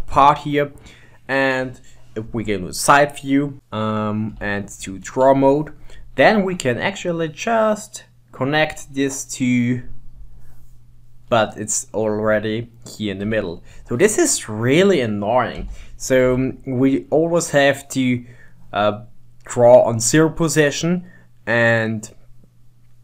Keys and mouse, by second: 2.1 middle click, 2.5 KP_2, 3.7 KP_3, 4.6 ctrl+Tab, 6.8-9.8 drag, 11.3-13.3 middle drag, 13.3 Tab, 13.8 click, 14.7-15.8 middle drag, 15.8 g, 19.1-19.5 middle drag, 20.8-21.4 middle drag.